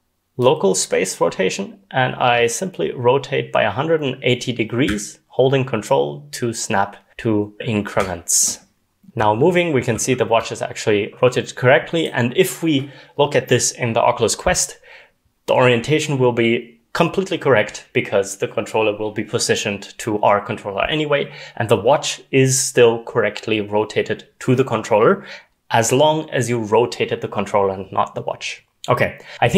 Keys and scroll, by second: 8.8-10.3 typing.